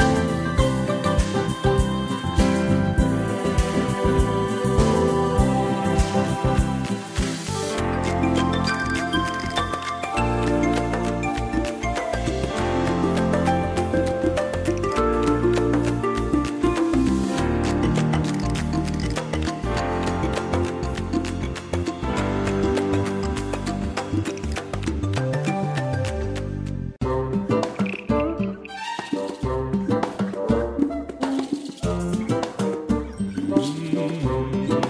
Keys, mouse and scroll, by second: 2.3 click, 4.2 ctrl+shift+click, 7.6 click, 8.8 ctrl+shift+click, 11.5 click, 21.5 click, 27.7 1, 31.0 click, 34.4 BackSpace.